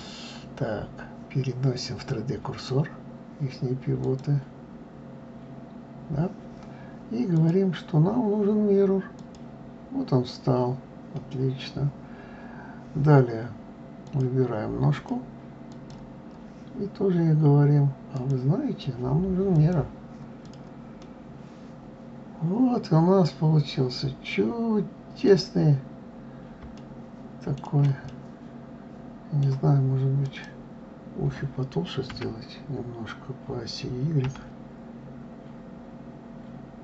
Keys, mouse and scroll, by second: 4.0 click, 7.3-10.4 drag, 14.0 click, 14.9 click, 15.7 click, 18.1-20.5 drag, 21.0-24.0 middle drag, 25.6-26.7 scroll up 2, 26.7-27.8 shift+middle drag, 28.0-30.2 middle drag, 30.2 click, 32.1 s.